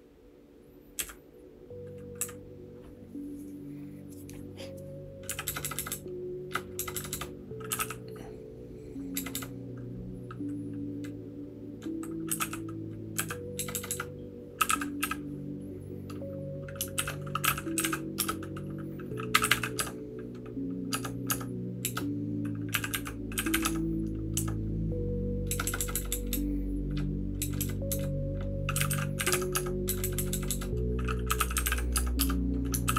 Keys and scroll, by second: 0.9 Down, 2.2 Down, 5.3 a, 5.4 shift+Tab, 5.6 shift+Tab, 5.7 shift+Tab, 5.9 shift+Tab, 6.4 shift+Tab, 6.7 shift+Tab, 6.9 shift+Tab, 7.1 shift+Tab, 7.4-8.3 typing, 9.1 shift+Tab, 9.3 shift+Tab, 12.4 e, 13.1 x, 13.6 shift+Tab, 13.7 shift+Tab, 13.8 shift+Tab, 14.4-15.5 typing.